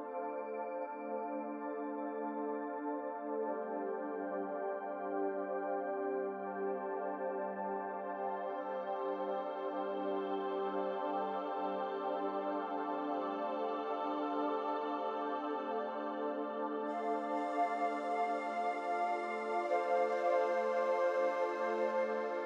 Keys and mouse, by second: 0.0-0.6 middle drag, 2.2 click, 4.3 middle click, 4.5 click, 5.2 middle click, 7.6 click, 8.4-8.9 middle drag, 10.3-12.1 drag, 13.2 Tab, 14.7 click, 16.9 ctrl+r, 20.1 ctrl+r.